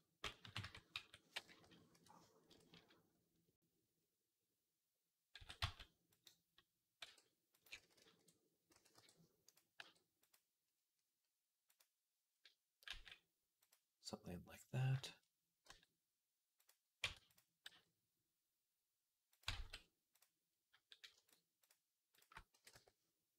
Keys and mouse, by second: 0.2 KP_3, 0.4 Tab, 0.8-8.1 middle drag, 0.8 a, 1.4 ., 5.2 s, 6.9 r, 7.6 ctrl+z, 7.8 ctrl+z, 8.5 s, 9.6 g, 11.5 click, 14.8 shift+middle click, 15.5 g, 16.9 Tab, 17.5-23.3 middle drag, 17.5 g, 19.4 ctrl+z.